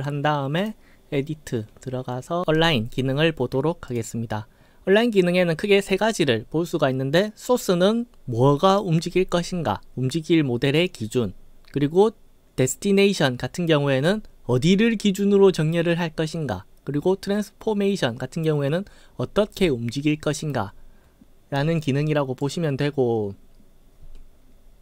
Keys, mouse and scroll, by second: 0.6 click, 3.9 click, 22.4 click, 24.4 scroll up 2.